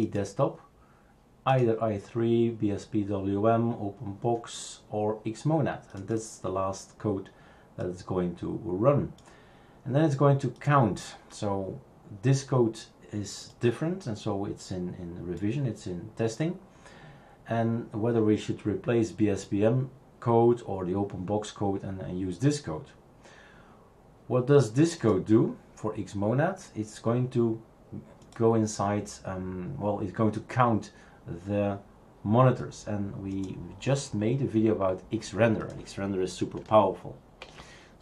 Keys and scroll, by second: 37.4 shift+super+q.